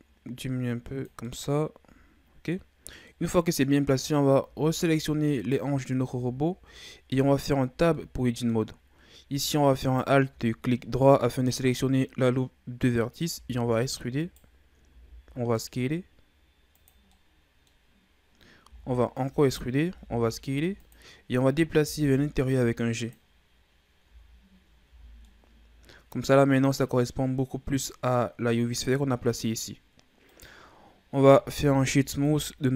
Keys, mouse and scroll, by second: 1.2-2.9 middle drag, 2.9 scroll down 2, 3.1-4.1 middle drag, 4.1 scroll up 2, 4.4 Tab, 5.4 right click, 5.8 scroll down 1, 6.3-7.2 shift+scroll up 6, 7.2 Tab, 7.9 middle click, 8.6-9.8 scroll up 1, 9.8 alt+right click, 13.4 e, 14.9 s, 17.1 middle click, 17.9-18.5 scroll up 1, 18.7 e, 19.9 s, 21.8 g, 24.1 Tab, 24.6-25.2 scroll down 3, 24.8 a, 25.2-28.3 middle drag, 30.3 right click, 31.4 w.